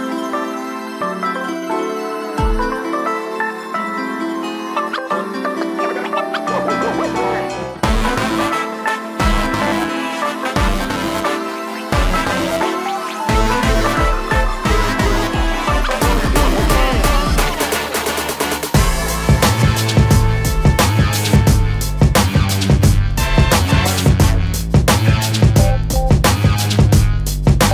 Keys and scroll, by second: 0.8 m, 2.3-4.2 typing, 4.2 Escape, 26.7 shift+space, 26.8 Escape.